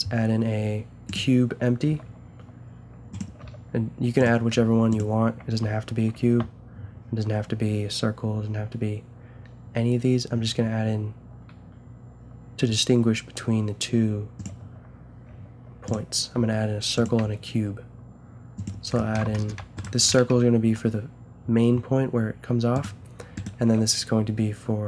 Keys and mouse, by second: 1.9 s, 3.4 g, 4.5 g, 6.2 shift+a, 15.3 g, 16.3 s, 17.2 g, 19.1 a, 19.5-22.5 drag, 20.3 g, 23.3 click, 23.7 g.